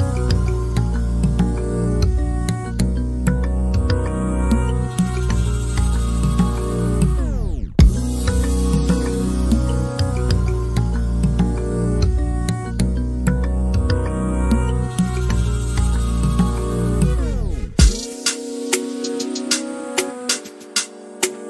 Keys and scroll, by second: 6.3 r, 7.3 c, 9.1-14.0 typing, 16.0 l, 20.9 k.